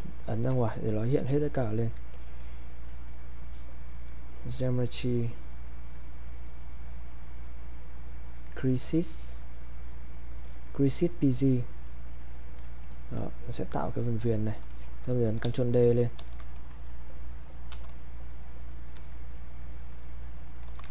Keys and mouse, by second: 0.0-2.8 ctrl+shift+drag, 8.3 click, 11.6 click, 15.4 ctrl+d, 17.7 shift+f, 20.7 ctrl+f.